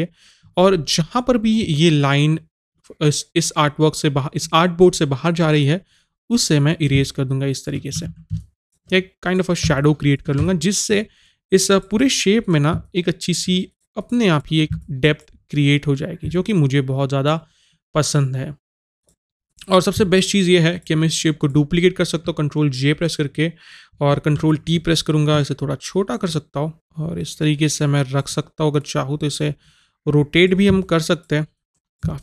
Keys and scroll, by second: 8.1 ctrl+z.